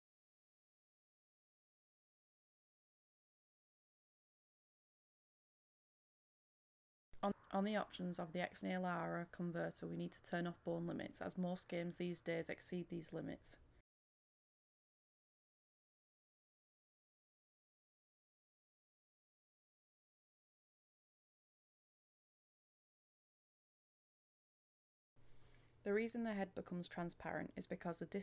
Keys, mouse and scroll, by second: 0.1 click, 1.3-17.1 drag, 17.8-27.4 drag.